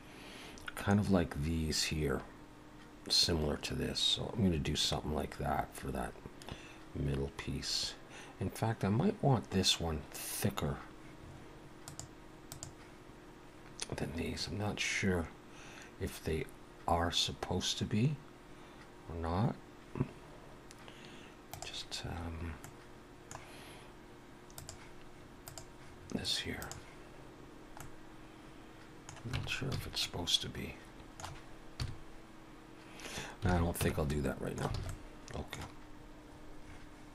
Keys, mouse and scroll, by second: 22.6 middle click, 24.6 click, 25.4 click, 27.8 middle click, 29.4 Tab, 29.7 a, 30.0 middle click, 31.8 KP_3, 33.5 alt+a, 33.8 Tab, 34.1 middle click, 34.7 alt+a, 34.9 middle click, 35.9-37.0 scroll down 1.